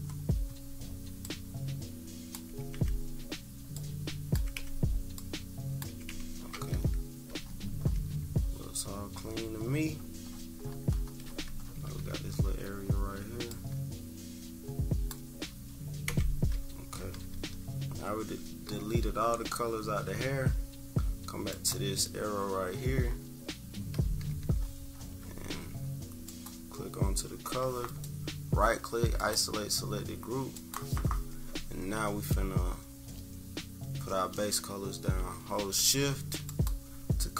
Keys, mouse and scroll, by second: 0.0-1.2 scroll up 4, 1.2-2.3 drag, 2.4 Delete, 2.7 Delete, 3.7 click, 4.3 Delete, 5.1 click, 5.8 Delete, 6.0 Delete, 6.4-6.9 scroll down 4, 7.3 -, 7.4-7.9 scroll up 4, 8.0 =, 8.1 =, 8.3 scroll up 2, 9.5 -, 9.9-11.8 scroll down 12, 9.9 -, 11.7 =, 11.9 =, 12.4-12.9 scroll up 2, 13.5-15.1 drag, 16.0 Delete, 17.0-18.9 typing, 18.6-19.0 scroll up 2, 19.5 scroll down 2, 21.5-23.9 drag, 24.0 =, 24.2 =, 24.5 =, 24.6-25.0 scroll up 2, 26.2 click, 27.8-29.1 right drag, 29.1-30.7 drag, 36.4 shift+click.